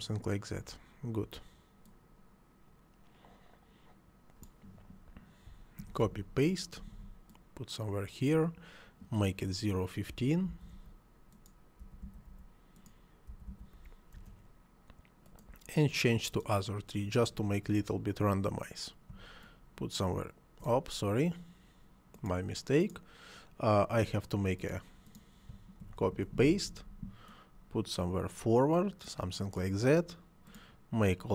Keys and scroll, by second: 5.8 ctrl+c, 6.0 ctrl+v, 10.1 ., 10.5 1, 10.7 5, 11.8 ., 12.0 1, 12.3 5, 13.3 ., 13.5 1, 13.8 5, 14.1 Return, 25.8 ctrl+c, 26.0 ctrl+v.